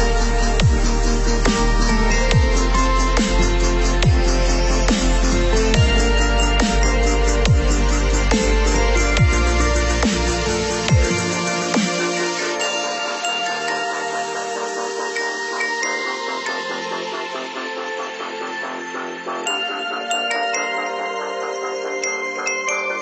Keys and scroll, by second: 6.4 ctrl+0, 7.7 ctrl+=.